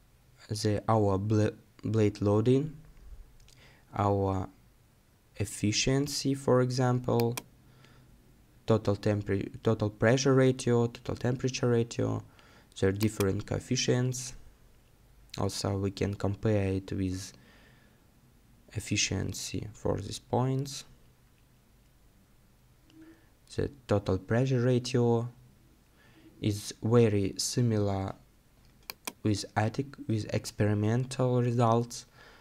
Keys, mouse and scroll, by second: 2.6 scroll down 1, 10.3-10.9 scroll down 1, 14.2 scroll down 1, 15.1 scroll up 1, 16.9-18.8 scroll down 1, 21.8-23.9 scroll down 1, 26.2 scroll up 1.